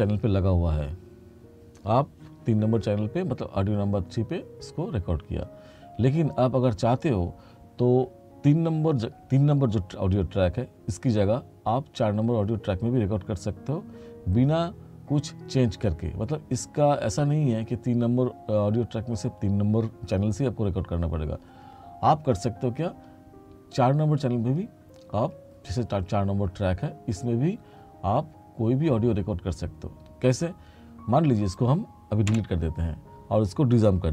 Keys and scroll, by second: 32.4 Delete.